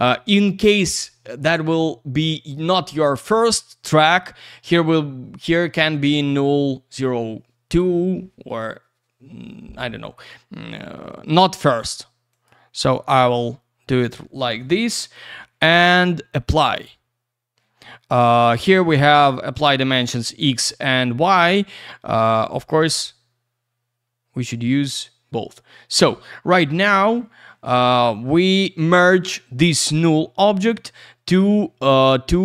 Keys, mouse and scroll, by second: 10.2 click, 10.3 click, 11.7 click, 11.8 click, 12.3 click, 12.4 click, 16.5 click, 16.6 click, 19.7 click, 19.9 click, 20.4 click, 20.4 click, 22.1 click, 22.2 click.